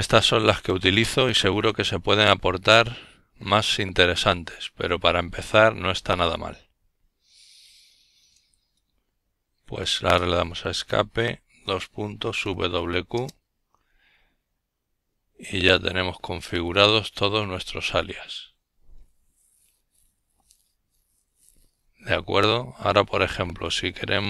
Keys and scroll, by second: 1.9 Escape, 4.1-5.5 typing, 8.7 ctrl+l.